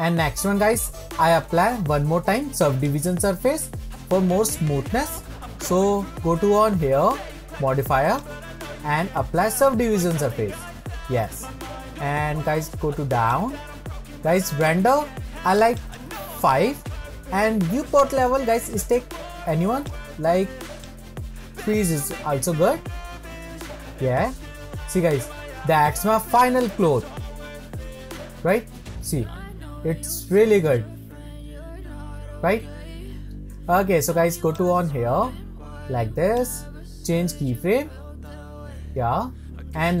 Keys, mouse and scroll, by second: 2.8-5.7 drag, 8.1-11.2 drag, 12.4-13.3 scroll down 6, 13.3-19.0 drag, 19.8-23.2 drag, 23.2-24.2 scroll up 5, 24.2-24.9 scroll down 4, 24.9-27.4 middle drag, 27.4-28.6 scroll up 4, 28.6-31.8 middle drag, 32.3-33.1 middle drag, 33.5 middle click, 36.6-38.6 drag, 38.6-39.6 scroll down 5, 39.8-40.0 middle drag.